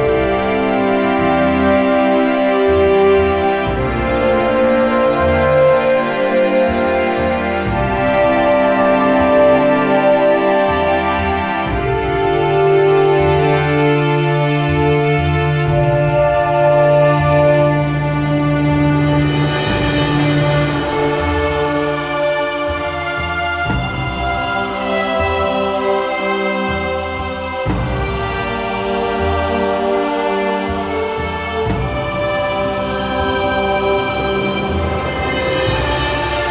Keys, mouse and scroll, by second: 0.5 middle click, 3.3 click, 4.8 alt+middle click, 5.8 shift+click, 6.2-6.6 scroll, 7.2 alt+middle click, 7.5 alt+scroll, 8.1-8.4 alt+scroll, 8.7 right click, 9.6 click, 10.9 alt+middle click, 11.1-11.5 scroll, 12.1 scroll, 17.8 alt+middle click, 19.0 click, 19.6-20.6 typing, 21.6 Return, 24.0 click, 25.4 click, 26.0 typing, 26.1 Return, 26.9-27.3 scroll, 27.8 ctrl+j, 31.9 click, 33.9 alt+middle click, 34.6 alt+middle click, 36.4 click.